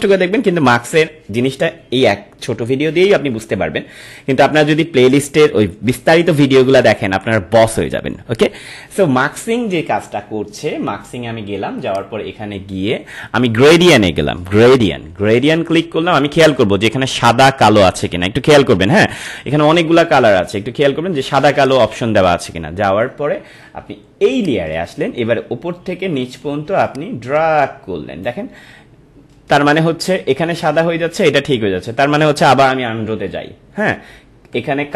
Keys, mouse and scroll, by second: 11.9 click, 14.7 click, 19.1 click, 21.6 click, 24.3 click, 26.8-30.8 drag, 32.4-34.9 drag.